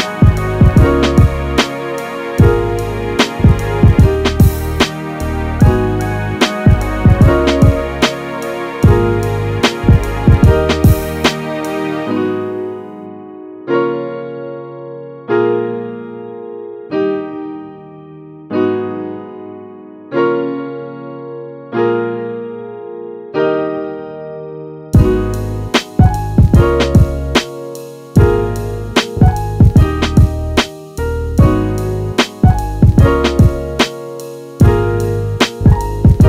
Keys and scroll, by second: 29.5 super+s, 30.3 Right, 30.8 shift+Up, 30.9-32.7 typing.